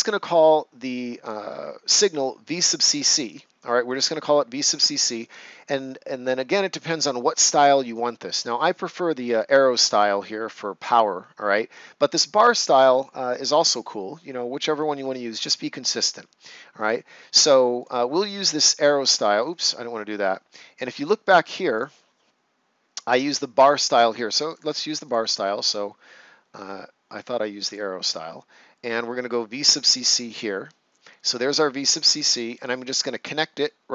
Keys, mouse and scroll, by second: 17.7 click, 21.7 click, 24.5 click, 27.6 click, 30.2 click, 33.5 click.